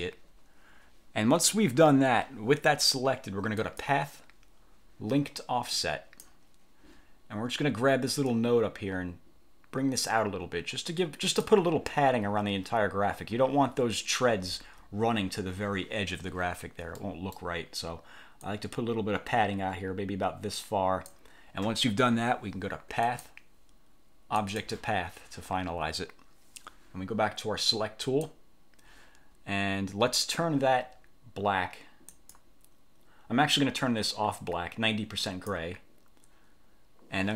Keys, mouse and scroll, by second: 3.7 click, 5.9 click, 8.4-11.7 drag, 14.6-14.9 ctrl+scroll up 2, 16.3 1, 17.1 click, 18.5-21.3 drag, 23.1 click, 24.5 click, 28.1 click, 32.3 click, 35.4 click.